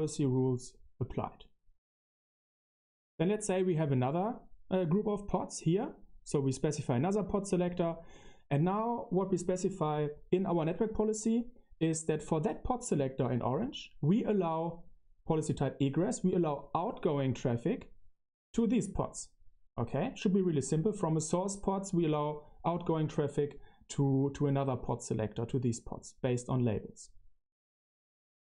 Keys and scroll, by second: 21.4 super+3, 23.4-27.5 typing.